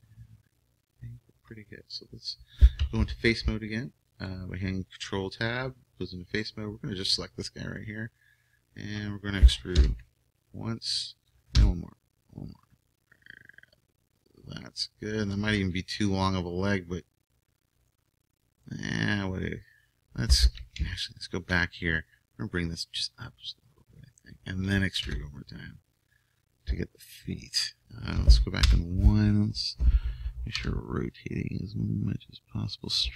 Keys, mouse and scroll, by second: 2.9 ctrl+Tab, 6.4-8.0 right drag, 7.8 middle click, 9.8 e, 11.5 e, 20.8 ctrl+z, 22.5-23.9 drag, 25.0 e, 28.6 KP_1, 30.5 KP_1, 30.5 r, 32.9-33.1 drag.